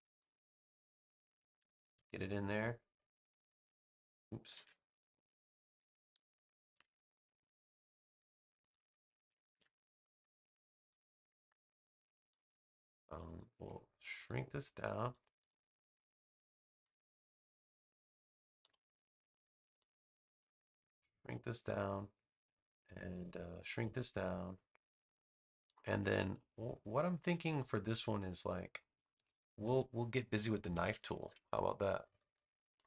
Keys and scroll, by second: 3.3 v, 4.5 super+z, 6.6 super+c, 9.4 super+v, 30.8 super+=.